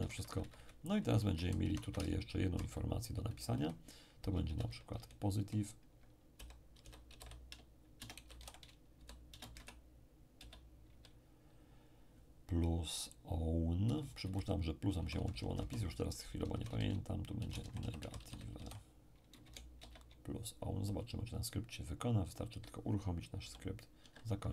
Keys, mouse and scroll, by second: 0.0 Up, 0.1 Up, 0.2 Up, 1.0 Down, 1.2 Down, 1.4 Down, 1.6 Up, 1.8 Up, 2.0 Right, 2.2 Right, 2.7 Left, 2.9 Left, 4.4 ', 4.9 p, 6.3-10.4 typing, 13.8 Down, 14.2 Down, 15.0 Right, 15.1 Right, 15.3 Right, 16.5-19.8 typing, 23.4 p, 24.0 Escape.